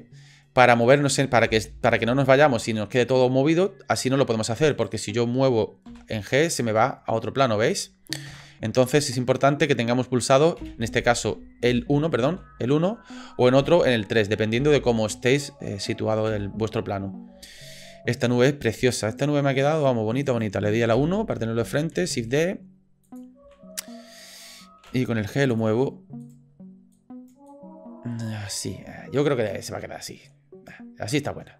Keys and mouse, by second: 1.5 Delete, 2.2-3.2 drag, 3.6-4.1 drag, 4.7 click, 5.9 g, 6.9-7.8 drag, 8.3 ctrl+z, 8.9-9.5 drag, 10.6 KP_3, 11.7 KP_1, 11.7 KP_2, 12.2 KP_1, 13.6 KP_3, 14.5 KP_1, 15.1 KP_3, 16.3 KP_1, 17.5 click, 19.6 click, 20.3 click, 20.9 KP_1, 21.9 shift+d, 23.4 s, 24.8 g, 26.2 click, 26.9 click, 27.5 click, 28.5 click, 30.3 click.